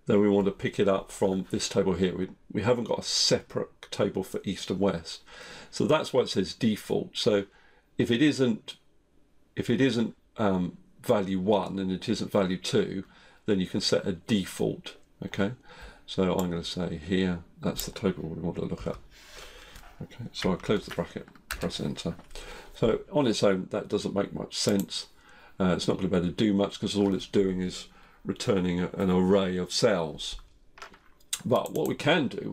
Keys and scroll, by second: 18.8 F4.